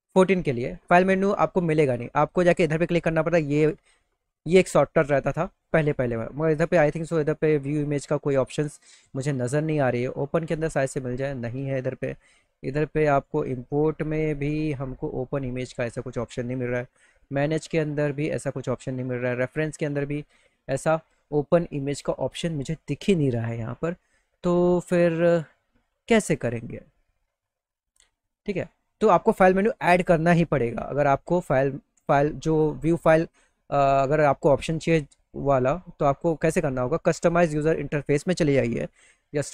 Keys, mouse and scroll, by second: 0.5 click, 1.9 click, 6.0 click, 9.9 click, 16.8 click, 19.1 click, 27.8 click, 35.9 click, 36.9 click.